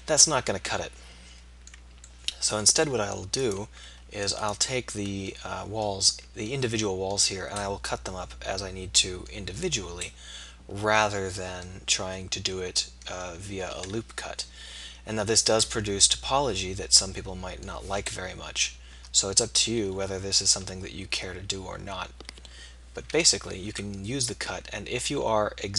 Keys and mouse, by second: 3.5 right click, 5.5-6.7 right drag, 7.5 middle click, 14.7 KP_3, 18.1 middle click, 18.7 KP_3, 20.4 z, 23.1 k.